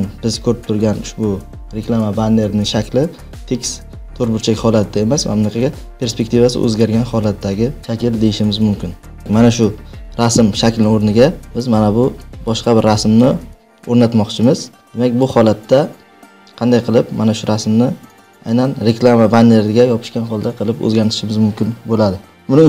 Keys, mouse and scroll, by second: 11.5 click, 13.1 click, 14.8 click, 16.1 click, 18.3-21.2 drag.